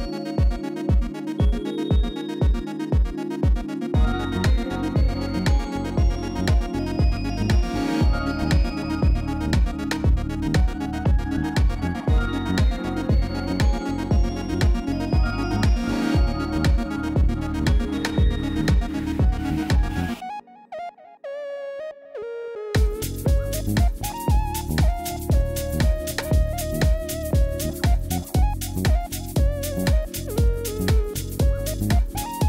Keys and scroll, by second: 2.6 alt+a, 4.1 shift+a, 4.9 Tab, 6.0 Return, 6.6 Tab, 7.1 g, 7.2 z, 8.6 g, 8.7 z, 11.2 Tab, 13.6 7, 13.8 Return, 17.9 alt+a, 30.0 Return.